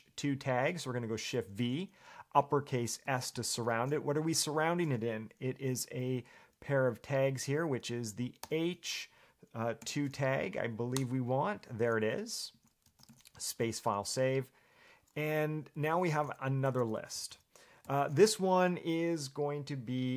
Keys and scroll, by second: 1.3 shift+v, 7.1 shift+s, 8.6 h, 10.0 2, 11.2 Return, 12.7 Escape, 15.7-18.0 typing.